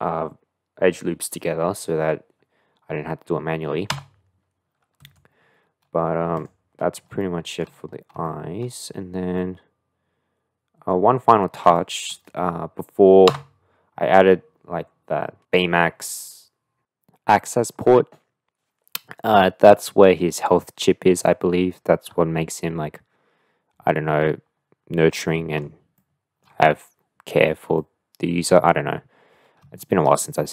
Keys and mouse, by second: 6.4 click, 7.2 shift+middle click, 8.2 shift+middle click, 9.3-10.9 middle drag, 11.8 shift+middle click, 13.3 Tab, 25.1-26.4 middle drag, 27.7-28.7 middle drag, 29.8 shift+middle click, 30.2-30.5 middle drag.